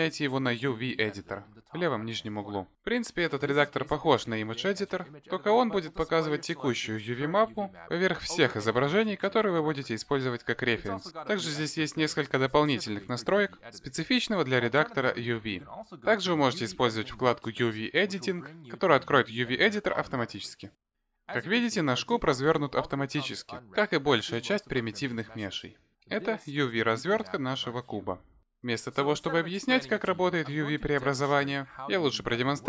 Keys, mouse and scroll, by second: 5.8-8.1 scroll down 15, 8.1 click, 12.5-15.8 scroll up 15, 21.2 click, 22.2 Tab, 26.7 a.